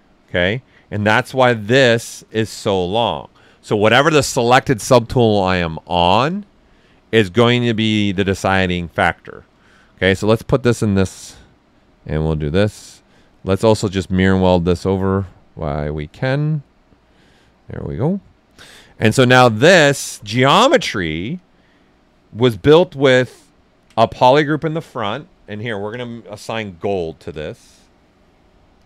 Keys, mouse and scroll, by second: 0.6 right click, 2.0 click, 10.1-19.0 drag, 20.1 shift+f, 21.3 click, 21.9 ctrl+right click, 25.9 click.